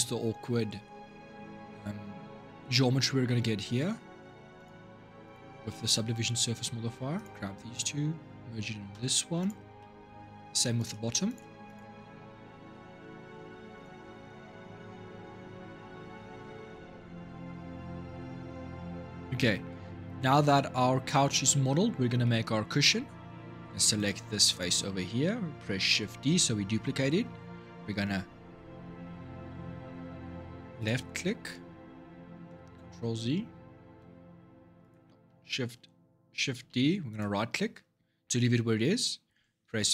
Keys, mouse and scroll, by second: 3.0-4.3 middle drag, 4.3 click, 5.5-6.9 middle drag, 6.9 shift+click, 7.5 shift+click, 8.7 m, 9.6 middle click, 10.5 click, 11.0 shift+click, 11.4 shift+click, 12.5 m, 15.2 shift+Left, 18.3 ctrl+shift+Left, 18.3 ctrl+shift+Right, 19.8-20.2 scroll down 3, 20.2-23.7 middle drag, 23.7 click, 25.7 shift+d, 32.2 ctrl+z, 33.8 g, 36.5 shift+d.